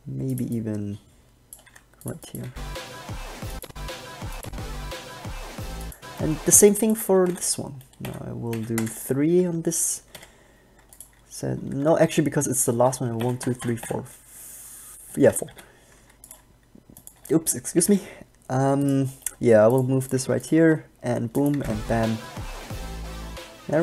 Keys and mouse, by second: 1.9 g, 2.6 alt+a, 6.8 alt+a, 7.5 Left, 8.2 Left, 8.7 Left, 9.0 KP_0, 10.3 i, 12.3 ctrl+z, 13.4 Left, 13.6 Left, 13.8 Left, 14.0 Left, 15.8 i, 17.5 b, 18.0 g, 19.2 middle click, 20.5 g, 21.7 alt+a.